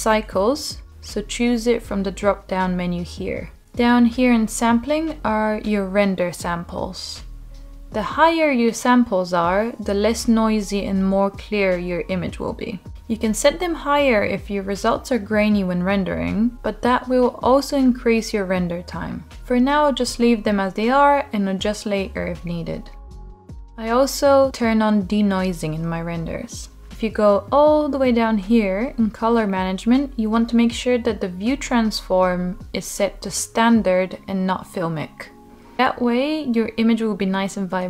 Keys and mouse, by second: 5.5-26.0 drag, 33.1-34.1 middle drag, 35.0-37.7 middle drag.